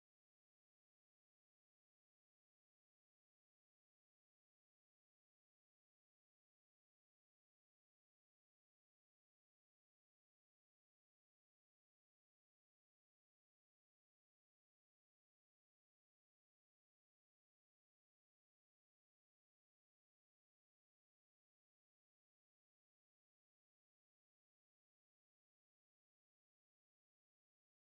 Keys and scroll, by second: 0.6 space, 0.7 Escape, 2.7-5.4 typing, 6.4 shift+s, 6.6 ctrl+alt+l, 6.7 shift+;, 7.1 space, 8.1-12.3 typing, 15.4-23.6 typing, 18.2 ctrl+alt+s, 20.1 ctrl+alt+s, 24.6-25.4 typing, 26.8-27.9 typing.